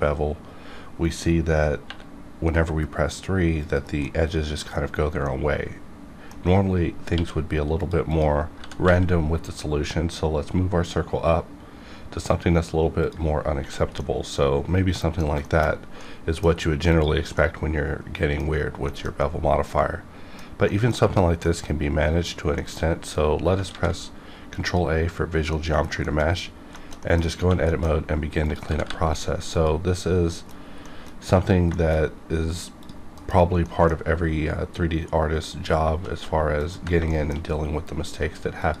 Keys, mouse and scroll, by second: 1.8 3, 3.6 click, 4.0 middle click, 5.0 scroll down 1, 5.2-7.1 middle drag, 7.1 q, 7.8 click, 8.5 g, 8.8 z, 10.8 g, 13.1 click, 13.5 h, 14.0-15.4 middle drag, 15.4 shift+middle click, 16.0 middle click, 16.9 click, 17.3-18.9 middle drag, 18.9 shift+middle click, 19.2-20.6 middle drag, 20.6 shift+middle click, 21.0 scroll up 1, 21.4 middle click, 21.6 middle click, 22.3 scroll down 1, 22.5 shift+middle click, 23.7 ctrl+a, 24.5 click, 25.5 middle click, 26.0 shift+middle click, 26.3 scroll up 1, 26.7 shift+middle click, 27.0 middle click, 27.2 scroll up 1, 27.6 shift+middle click, 28.4 click, 28.6 g, 28.8 g, 29.5 click, 30.3 middle click, 31.7 shift+middle click, 32.1-32.4 scroll up 1, 32.8 click, 33.1 KP_Decimal, 33.5 scroll down 1, 33.6 middle click, 34.1 scroll down 1, 36.6 ctrl+click, 36.7 ctrl+click, 37.1 shift+middle click, 38.6 shift+click.